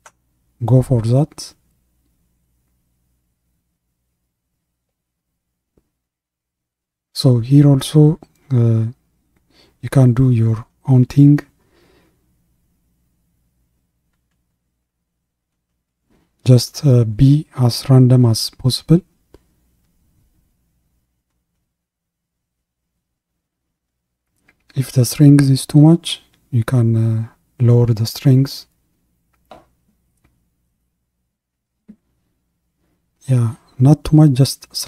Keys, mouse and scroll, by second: 0.0-6.1 drag, 6.1 ctrl+z, 9.0-19.7 drag, 19.7 ctrl+z, 21.6-23.8 ctrl+drag, 23.8 ctrl+z, 26.2-29.3 drag, 29.3 ctrl+z, 30.9-34.8 drag.